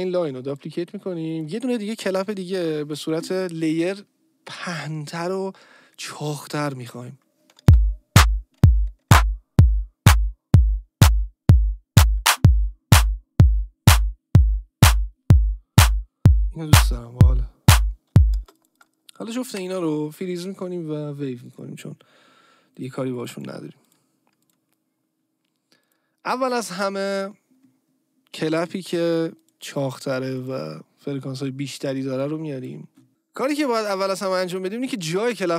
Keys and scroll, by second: 6.7 Down, 7.6 space, 18.3 space.